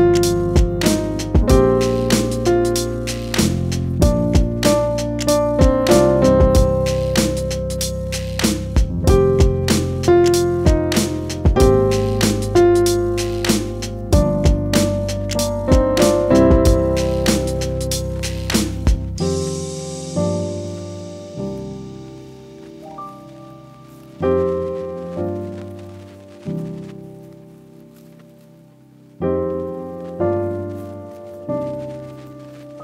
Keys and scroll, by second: 5.0 ctrl+-, 6.2 ctrl+=, 6.4 ctrl+-.